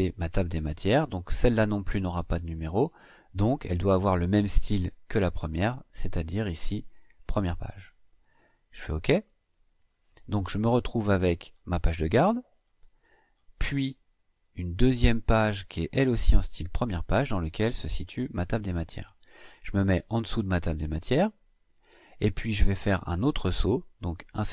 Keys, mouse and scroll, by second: 6.9 click, 8.9 click, 10.5-11.2 scroll up 4, 12.3-13.0 scroll down 4, 13.4 scroll down 2, 14.6 click, 15.1-15.5 scroll down 2, 19.8 click, 23.9 click.